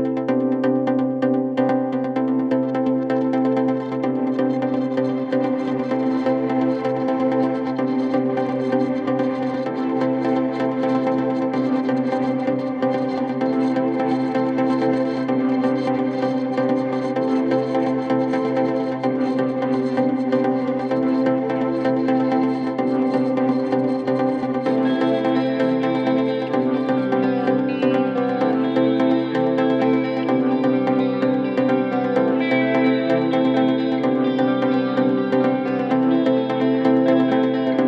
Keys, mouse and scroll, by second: 16.7 ctrl+t, 31.5 Return.